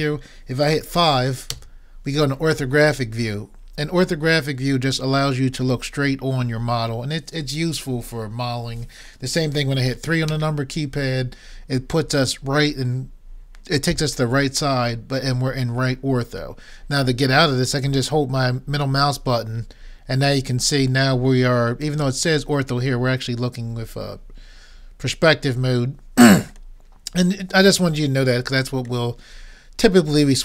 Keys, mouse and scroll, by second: 1.5 KP_5, 10.3 KP_3, 19.3-23.3 middle drag, 23.5-25.0 middle drag, 29.1 middle click.